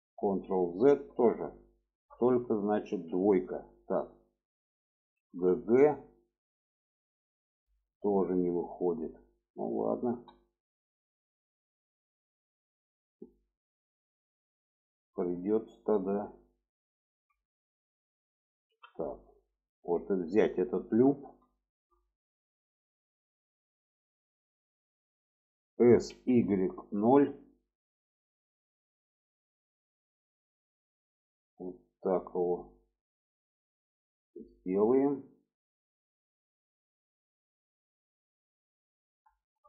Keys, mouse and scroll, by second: 0.0 ctrl+z, 1.1 shift+middle click, 1.5 shift+middle click, 2.7 2, 3.3 click, 5.0 g, 7.8-8.1 shift+middle drag, 9.0 click, 9.9 1, 10.3 click, 11.1-13.2 drag, 14.0-14.6 shift+middle drag, 15.2 shift+middle click, 17.2 shift+middle drag, 18.5 2, 19.3 click, 20.3 click, 21.3 middle click, 22.2 shift+middle click, 25.5 s, 29.9 click, 34.5-38.9 middle drag, 39.2 shift+middle click.